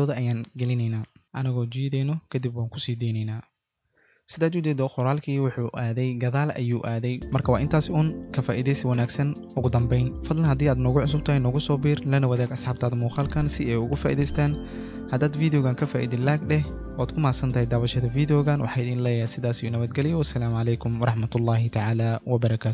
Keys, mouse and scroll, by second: 3.9 click, 4.8 click.